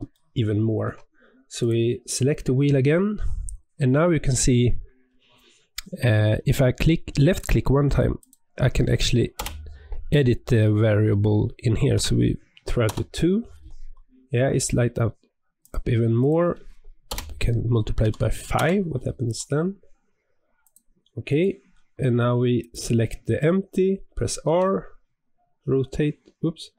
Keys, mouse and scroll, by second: 0.1-1.5 shift+middle drag, 1.5 click, 2.8-6.3 scroll down 12, 7.2-10.4 drag, 15.5-18.6 drag, 20.5 click, 21.2 click, 22.5 click, 24.4 r.